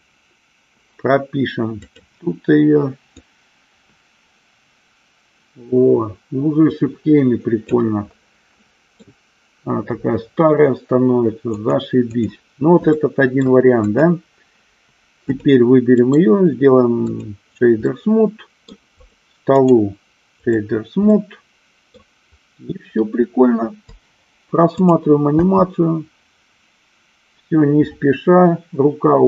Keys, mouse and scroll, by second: 2.1 click, 3.4-8.0 drag, 8.8 middle click, 11.8 click, 13.2-13.7 middle drag, 14.2 click, 15.6 click, 16.3-17.6 right drag, 18.1-19.0 middle drag, 19.8-20.8 right drag, 21.3-22.2 middle drag, 25.0 click, 25.6 space.